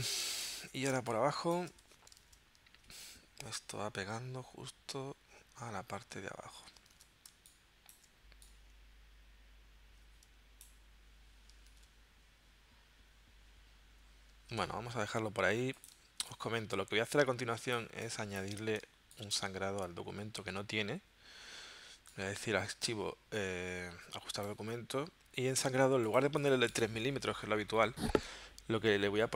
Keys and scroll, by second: 1.0 space, 1.9 v, 2.3 super+Tab, 7.0 super+Tab, 7.3 space, 11.7 super+Tab, 14.4 super+Tab, 16.0 space, 18.9 space.